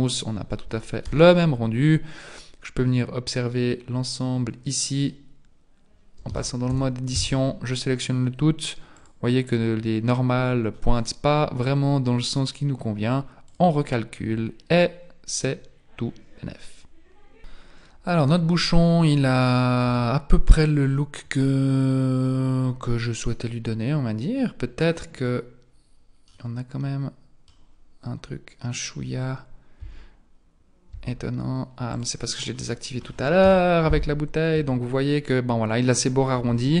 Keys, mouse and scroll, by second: 0.2-1.0 scroll down 1, 1.0 n, 6.2 Tab, 6.7 a, 7.1 a, 9.0 click, 10.9-11.6 scroll up 1, 11.6-12.2 scroll up 6, 12.2-13.4 scroll down 4, 13.4 click, 17.4 KP_1, 17.6-18.3 scroll down 1, 18.3 scroll down 4, 19.1-19.6 scroll up 2, 19.6 scroll up 1, 19.9 Tab, 26.3 middle click, 29.8 Tab, 30.9 Tab, 31.9 click, 33.4 KP_1, 34.5 Tab, 36.3 Tab.